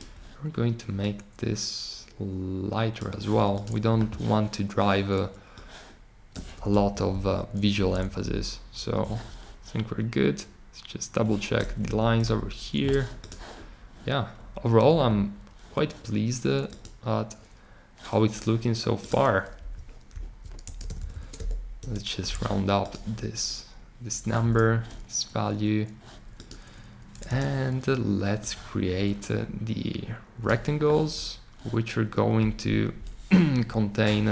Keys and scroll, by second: 6.9 shift+Up, 7.1 shift+Up, 7.7 Down, 7.9 Down, 8.0 Down, 8.2 Down, 11.8 Up, 12.2 Down, 19.5 Down, 20.1 Right, 20.8 shift+Right, 21.8 Return, 27.2 r.